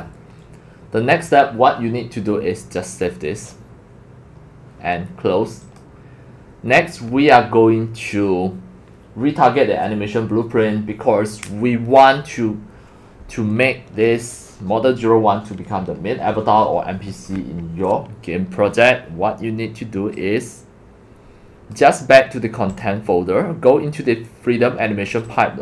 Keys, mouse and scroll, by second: 2.3 drag, 3.4 click, 5.6 click, 6.1-10.8 drag, 19.0 scroll down 1, 21.7 click, 23.0 click, 25.1 scroll down 2, 25.5 click.